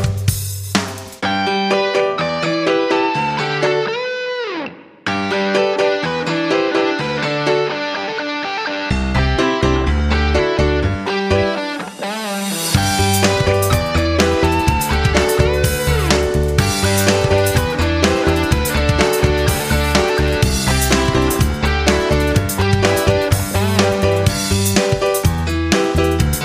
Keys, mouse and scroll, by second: 4.1 click, 19.9 scroll down 1, 21.4 click, 26.1 F9.